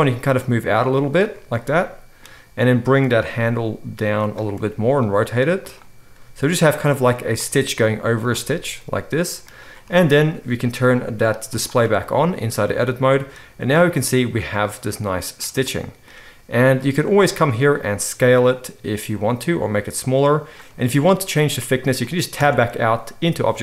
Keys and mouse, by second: 0.1 g, 3.0 click, 3.4 g, 4.5 r, 6.2 g, 7.5 g, 11.5 click, 12.8-16.9 middle drag, 16.9-20.5 drag, 17.4 s, 20.5-23.6 middle drag, 22.4 Tab.